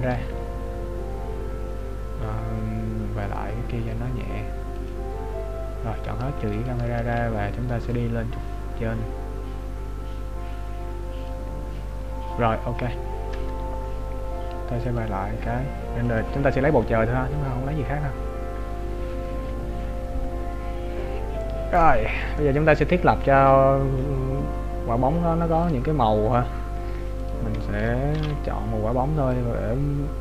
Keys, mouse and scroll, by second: 3.6 click, 6.6 shift+click, 8.2 click, 15.0 click, 26.3 click, 28.6 ctrl+b.